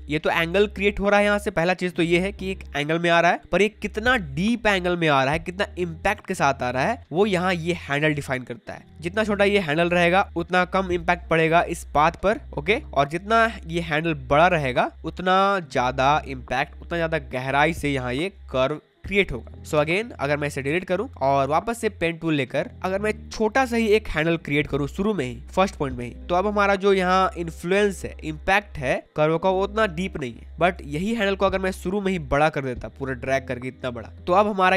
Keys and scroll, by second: 19.7 v, 20.6 Delete, 30.5 ctrl+z.